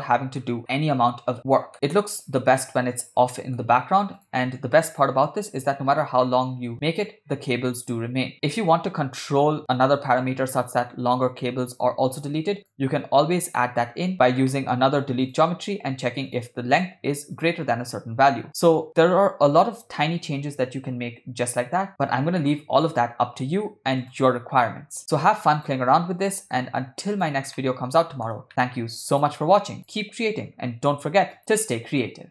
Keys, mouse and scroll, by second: 0.4 ctrl+middle drag, 0.8 ctrl+middle click, 1.9-3.1 ctrl+middle drag, 3.4 shift+middle click, 4.3 click, 5.0 g, 12.6 click, 13.6 middle click, 14.1 ctrl+middle click, 14.5 middle click, 15.3 click, 16.4 drag, 16.8 click, 17.4 click, 22.5-23.6 middle drag, 24.1 click, 24.9 g, 25.6 click, 26.3 g, 27.6-28.3 middle drag, 28.5 shift+middle click, 29.2 click, 29.8 click, 30.8 g.